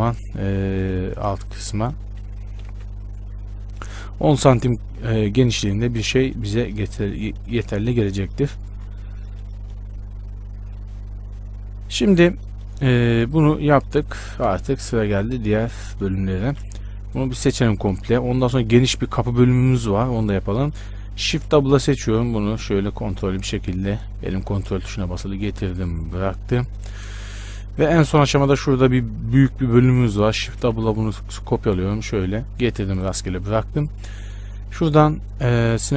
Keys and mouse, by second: 2.9 KP_Decimal, 7.7 z, 12.7-14.7 right drag, 14.7 KP_1, 15.3 z, 15.6 a, 17.1 b, 21.5 shift+d, 30.7 shift+d, 35.2-35.9 drag.